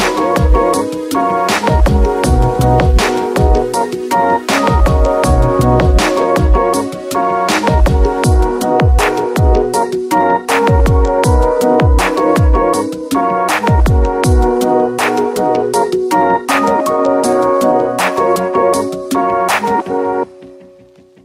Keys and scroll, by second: 11.8 Return, 18.8 Return.